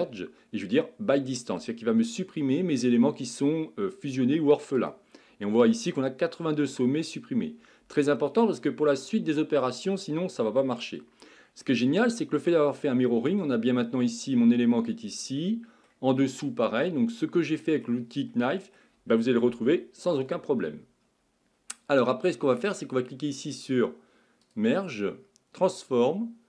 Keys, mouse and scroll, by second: 11.6-14.7 middle drag, 15.4-19.6 middle drag, 19.6 KP_1, 24.4-26.4 drag.